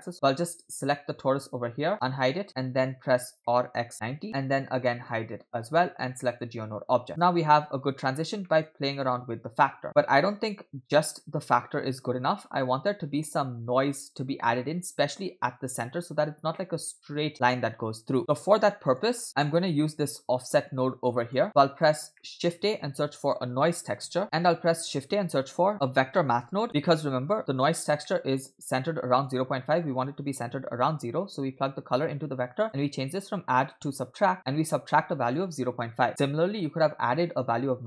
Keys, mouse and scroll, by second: 0.1 ctrl+z, 0.8 click, 1.9 click, 3.7 r, 3.8 x, 5.1 click, 5.5 click, 6.2 click, 7.1-8.1 scroll down 2, 8.1-8.4 scroll up 2, 8.5 middle click, 9.1-18.1 drag, 18.2 click, 19.3 middle click, 20.7 click, 21.7 click, 22.1 middle click, 22.6 shift+a, 28.0 middle click, 28.8-29.3 drag, 29.5-30.3 scroll up 1, 30.3 click, 32.6-34.4 drag, 35.0-36.6 shift+drag.